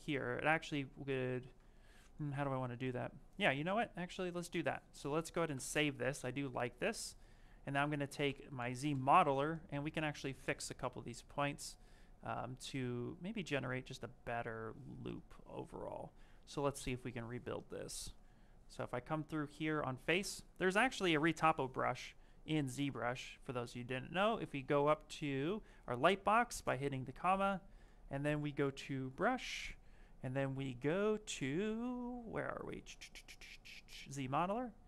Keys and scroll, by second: 0.7 s, 16.9 s, 19.7 space.